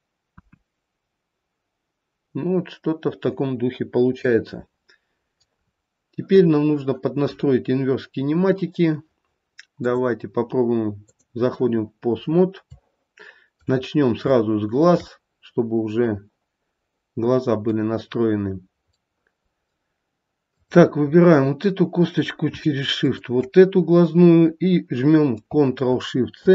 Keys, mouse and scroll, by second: 0.4 KP_1, 4.3 middle click, 5.0 middle click, 5.6-8.1 scroll down 3, 9.8 click, 12.1-12.7 scroll up 1, 12.8 shift+middle click, 13.8-14.4 scroll up 3, 14.4 shift+middle click, 15.1 middle click, 15.5 middle click, 16.0 middle click, 16.9 middle click, 19.2 middle click, 20.5 click, 21.2-21.9 scroll up 2, 23.0 shift+click.